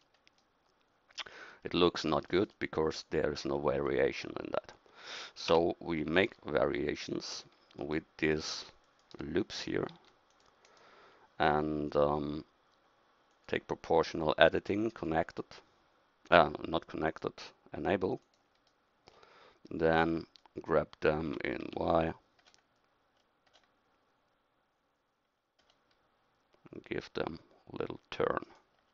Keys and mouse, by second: 5.5 Tab, 9.5 a, 9.9 c, 18.7-21.3 middle drag, 21.3 g.